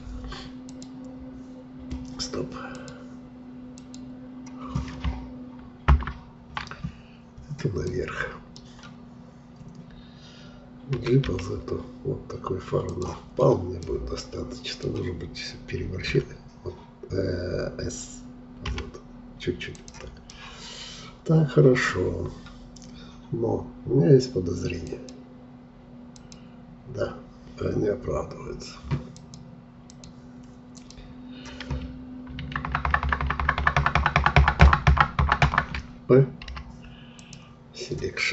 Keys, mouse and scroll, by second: 5.8 ctrl+KP_Add, 7.9-10.9 middle drag, 10.9 g, 13.3 scroll down 1, 13.8-16.0 middle drag, 16.0 g, 20.2-23.2 middle drag, 24.8-32.2 drag, 32.2 ctrl+KP_Add, 32.6 ctrl+KP_Add, 32.8-33.5 ctrl+KP_Add, 36.4 p.